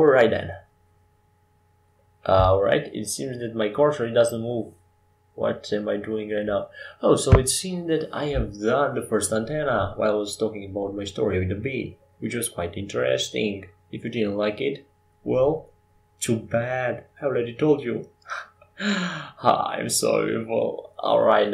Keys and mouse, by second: 3.7 middle click, 8.0 Tab, 9.5-11.4 drag, 11.6-16.3 drag, 16.3-18.6 middle drag, 18.6-20.5 right drag, 20.5-21.5 drag, 21.2-21.5 right drag.